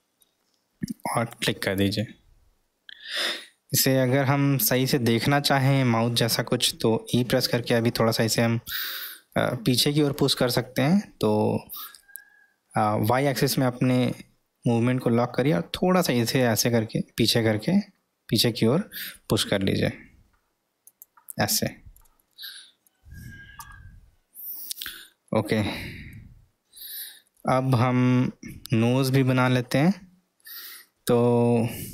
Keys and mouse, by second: 7.1 e, 22.4-22.9 middle drag, 25.3-26.1 middle drag, 27.2 middle click, 27.6-29.9 middle drag, 31.2 middle click.